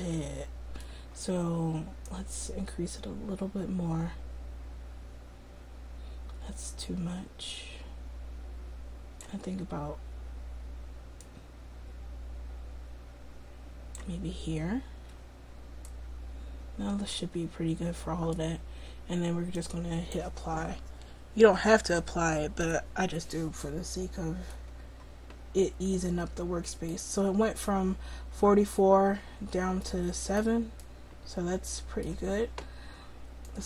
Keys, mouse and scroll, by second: 2.2-4.8 drag, 11.6-14.4 drag, 16.0 middle click, 17.5 middle click, 19.6-21.6 drag, 22.7 middle click, 30.4 middle click, 33.5-33.6 drag.